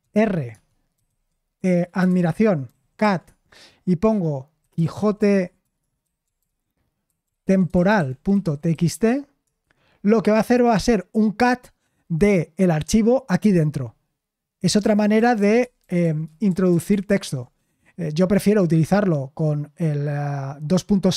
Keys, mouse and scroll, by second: 1.0-3.5 typing, 4.9-9.4 typing, 14.8 ctrl+u, 15.1 ctrl+u, 15.6-16.9 ctrl+u.